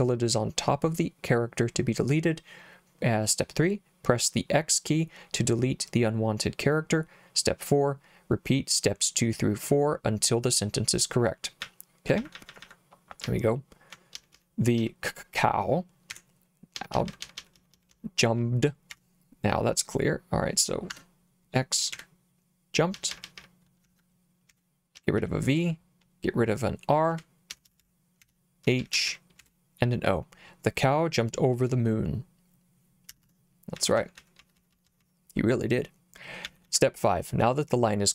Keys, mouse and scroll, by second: 11.6-14.8 typing, 16.1-19.0 typing, 21.9-25.7 typing, 26.9-29.9 typing, 33.1 Escape, 33.5-36.7 typing.